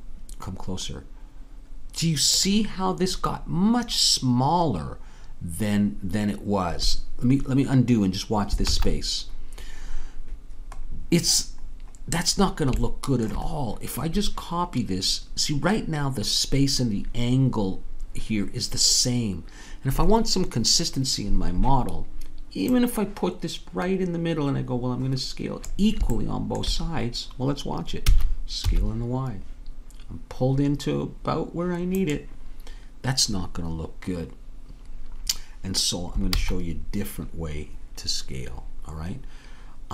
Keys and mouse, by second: 8.7 ctrl+z, 12.2-13.7 middle drag, 22.8-25.6 drag, 28.1 s, 36.3 ctrl+z.